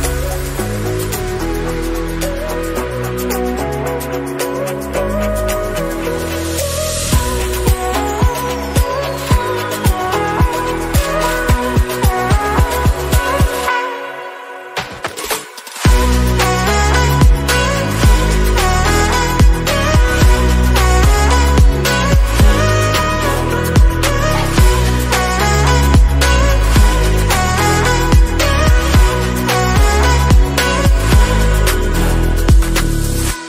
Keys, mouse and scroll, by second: 0.0 r, 3.8 click, 4.3-5.3 drag, 6.4-8.3 drag, 8.7 scroll up 1, 8.9 middle click, 9.3 scroll up 2, 9.5 KP_Decimal, 9.8 middle click, 10.3 click, 10.6-11.6 middle drag, 11.6 scroll up 1, 11.8 middle click, 12.7 /, 12.9 middle click, 13.6 /, 13.8-16.2 middle drag, 14.8 click, 16.2 s, 18.4 Tab, 19.1-20.1 scroll down 4, 20.1 click, 20.5 Tab, 20.8 click, 21.3-21.8 scroll down 4, 21.8-22.9 drag, 28.4 click, 28.6 click, 29.1-30.8 drag, 30.8 KP_0, 32.3 BackSpace, 32.5 BackSpace, 32.9-33.3 scroll down 9, 33.3 shift+middle click.